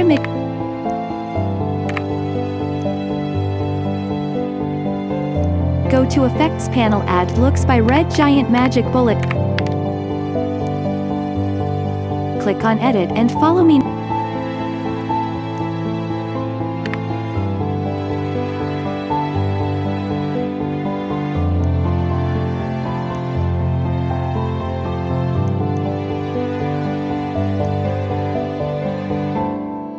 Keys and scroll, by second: 0.1 ctrl+shift+d, 1.8 Delete, 7.9-9.5 typing, 16.8 t.